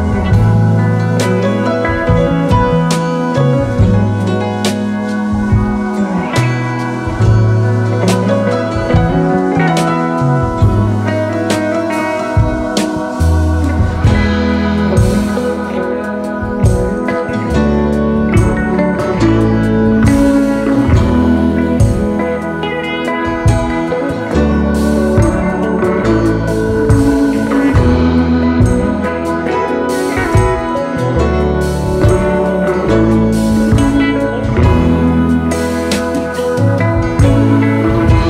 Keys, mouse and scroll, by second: 2.7 alt+scroll down 2, 2.9 space, 4.2 shift+click, 4.7 alt+click, 6.1 double click, 10.7 alt+scroll down 2, 10.9 space, 12.0 alt+scroll up 1, 13.3 space, 13.4 space, 14.0 alt+scroll down 1, 14.2 space, 17.8-18.5 typing, 21.4-23.7 typing, 27.0 Delete, 27.9 space, 28.5 alt+scroll up 2, 28.9 space, 31.6-32.9 typing, 32.8 alt+scroll down 1.